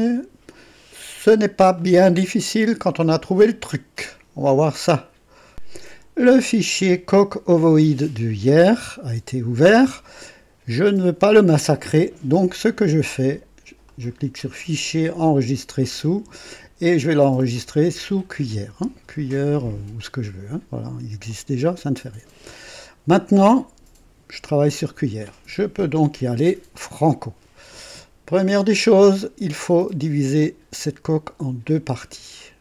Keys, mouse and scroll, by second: 1.8-3.2 drag, 5.5 click, 13.8 click, 15.2 click, 17.8 click, 19.9 click, 21.3 click.